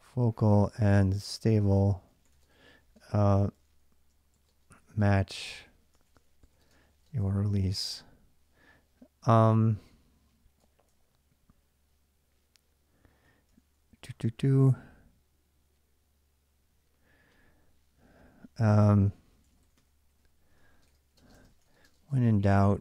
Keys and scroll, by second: 0.0-8.0 typing, 10.4-14.4 typing, 19.1-22.8 typing.